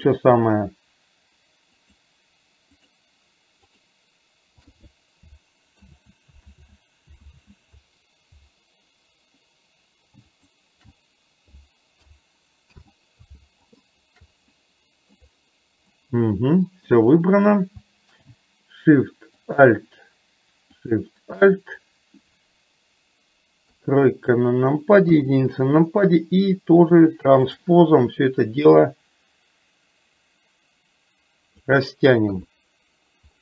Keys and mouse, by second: 2.0 click, 5.8 ctrl+z, 6.7 ctrl+z, 7.5 ctrl+z, 10.3 click, 12.8 ctrl+z, 13.8 click, 14.6 middle click, 16.1 middle click, 19.6 click, 21.0 click, 23.7 KP_3, 27.6 click, 29.1-31.6 drag, 32.3 KP_3.